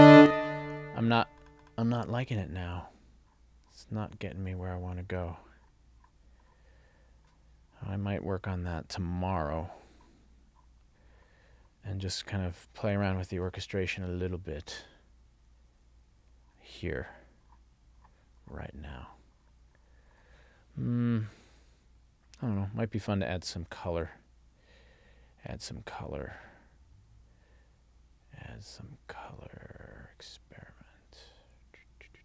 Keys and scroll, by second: 0.1 space.